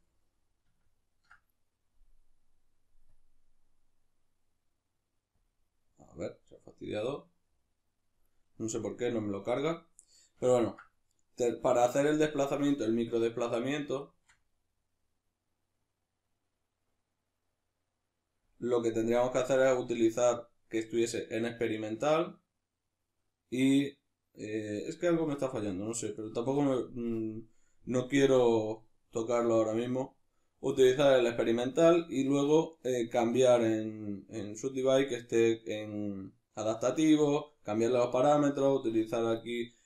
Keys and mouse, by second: 3.1 click, 7.4-39.8 middle drag.